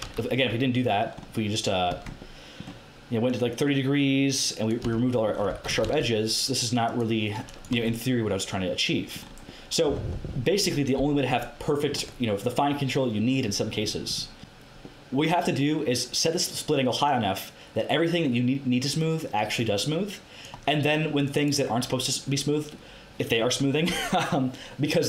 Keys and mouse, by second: 1.9 Tab, 3.4-4.8 drag, 4.8 Tab, 5.5 a, 5.8 ctrl+e, 7.7 Tab, 11.3-13.2 middle drag, 16.2-25.0 drag.